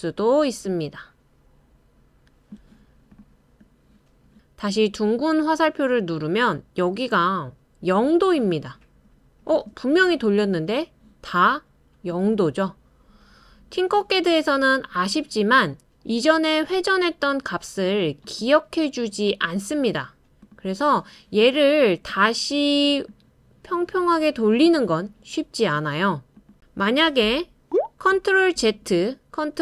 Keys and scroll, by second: 28.6 super+z, 29.5 super+z.